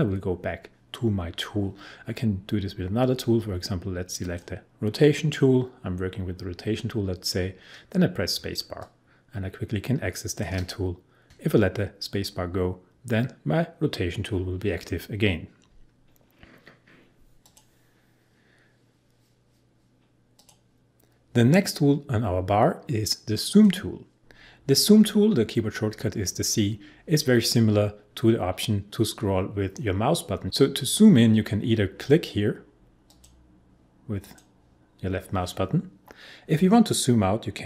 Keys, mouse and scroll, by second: 4.2 click, 8.3 space, 8.7 click, 8.8 space, 17.4 click, 20.3 click, 23.5 click, 32.1 click.